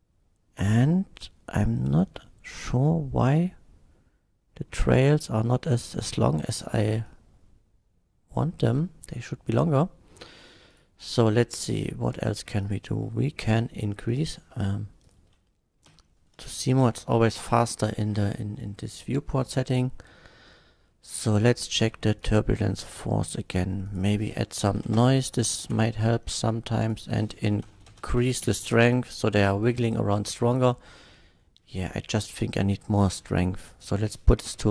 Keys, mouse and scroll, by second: 7.0-8.4 drag, 9.5 click, 10.7 click, 11.7 click, 12.6 click, 14.1 click, 14.5 middle click, 15.0 click, 16.0 h, 16.6 KP_1, 17.4 shift+Left, 21.3 click, 22.2 click, 23.9 click, 24.7 KP_4, 24.9 Return, 25.6 shift+Left, 26.8 click, 27.4 KP_8, 27.6 KP_0, 27.8 KP_8, 27.8 KP_0, 27.9 Return, 28.4 shift+Left, 29.9 shift+click, 30.2 space, 31.4 middle click, 33.7 click, 34.5-34.7 typing.